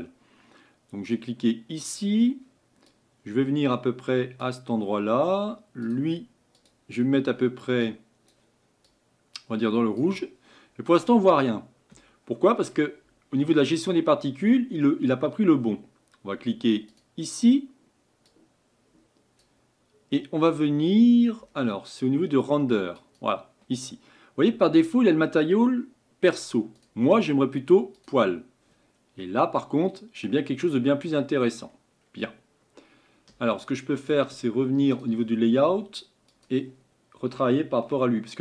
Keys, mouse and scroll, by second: 1.1-2.9 drag, 5.9-7.8 drag, 18.4-32.3 drag, 32.3-35.0 scroll down 7, 35.0 click, 36.4-37.9 drag, 37.9-38.4 shift+middle drag.